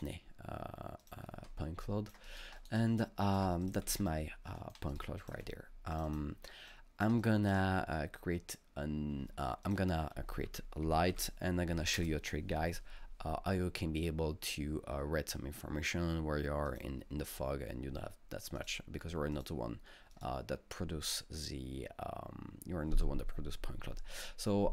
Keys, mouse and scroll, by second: 1.0 click, 1.9 alt+click, 2.3 alt+right click, 2.6 alt+double right click, 2.6 alt+click, 3.1 alt+click, 4.1-6.7 alt+middle drag, 4.1 alt+scroll up 1, 4.9-7.2 alt+drag, 7.2-9.7 alt+drag, 9.7 click, 10.5 ctrl+space, 10.6-11.8 typing, 12.0 Return, 16.7 click, 18.6 click, 19.4 click, 20.1 click.